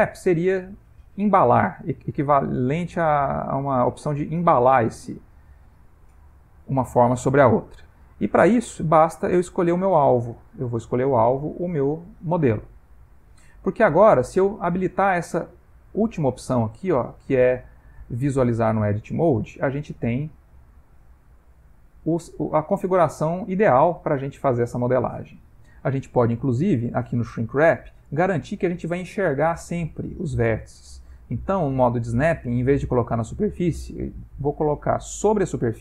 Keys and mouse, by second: 2.9 click, 3.7 click, 5.0 click, 9.6 click, 17.5 click, 18.9 ctrl+middle click, 19.9 g, 21.6 middle click, 22.4 ctrl+middle click, 23.0 middle click, 24.5 ctrl+middle click, 33.0 click.